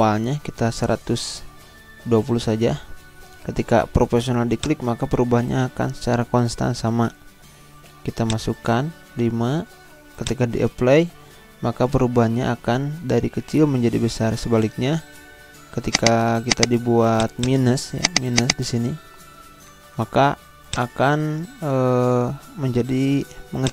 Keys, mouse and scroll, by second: 0.4 1, 2.2-3.0 typing, 4.5 click, 8.2 click, 9.2 5, 10.1 click, 15.9 click, 20.5 ctrl+z, 20.7 click, 21.0 ctrl+z, 23.6 click.